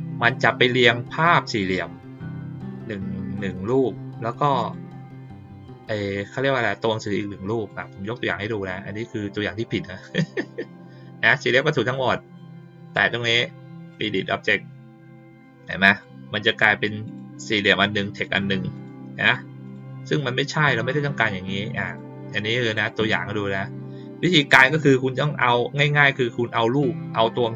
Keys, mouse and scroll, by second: 1.1 click, 3.3 click, 4.5 click, 7.0 click, 7.6-8.3 drag, 12.8 click, 13.9 click, 15.8 click, 17.0 click, 18.2 click, 18.7 click, 19.2 click, 19.6 click, 20.0 click, 20.4 click, 21.8 click, 22.7 click, 25.3 click.